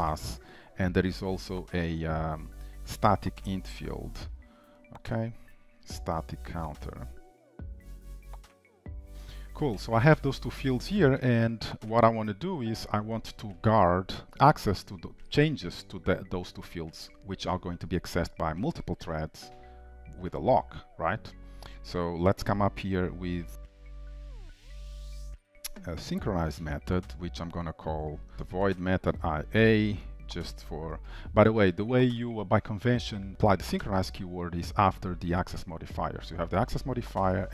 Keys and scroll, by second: 4.3 Return, 9.8 shift+Return, 11.5 ctrl+s, 25.0 Return, 34.7 ctrl+shift+Right.